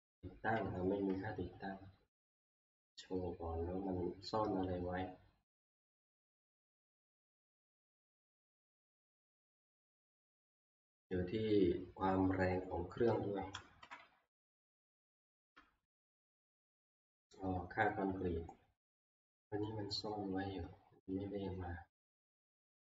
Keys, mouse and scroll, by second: 0.5 Escape, 5.6 click, 6.6 click, 8.2 click, 13.8 scroll down 1, 16.3 F2, 16.3-16.8 scroll down 1, 19.6-20.7 scroll down 1, 20.7-22.1 scroll up 1, 22.1 scroll, 22.4 Escape.